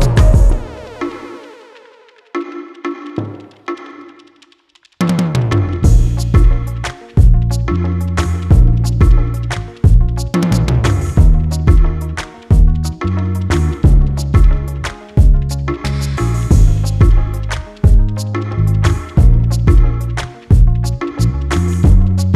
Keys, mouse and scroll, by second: 0.3 click, 1.9 s, 5.0 click, 5.9 s, 8.8 click, 9.6 click, 11.6 click, 12.6-13.4 scroll down 29, 13.6-14.3 scroll up 12, 16.3 s, 18.6 g.